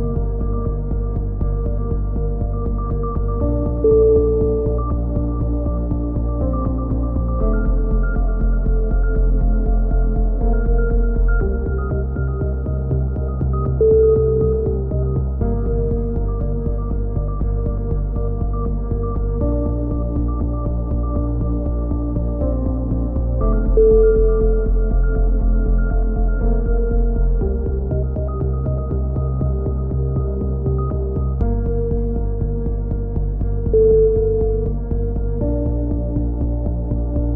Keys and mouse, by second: 0.3 middle click, 0.9 KP_1, 1.6-3.4 middle drag, 2.0 s, 3.4 click, 3.7 a, 4.1 Tab, 4.1 z, 4.4 middle click, 4.4 z, 4.7 a, 5.0 click, 8.4 KP_7, 8.7 z, 9.1 Tab, 10.2 middle click, 10.5 click, 13.3 middle click, 13.3 KP_3, 13.9 z, 14.2 z, 15.5-18.3 middle drag, 17.2 b, 18.3 e, 19.0 click, 22.2-26.2 middle drag, 26.2 a, 27.4 b, 29.6 click, 32.7-34.7 drag, 35.4 s.